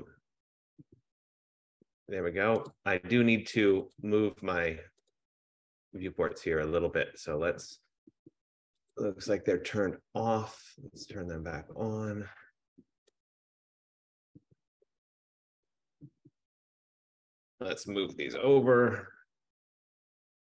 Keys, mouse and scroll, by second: 0.2 click, 2.8 click, 4.6 click, 9.0 click, 11.8 click, 13.4 click, 15.0 click, 15.3 click, 16.0 click, 17.4 click, 17.9-18.9 typing, 19.9 click.